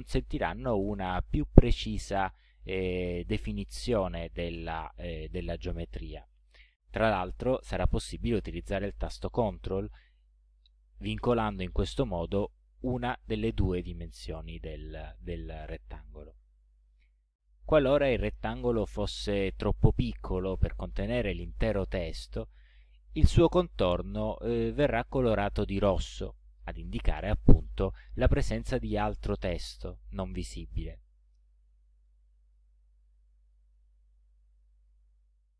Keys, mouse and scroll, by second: 1.8-3.2 drag, 8.0-15.7 ctrl+drag, 17.6-19.6 drag, 32.2-33.7 drag.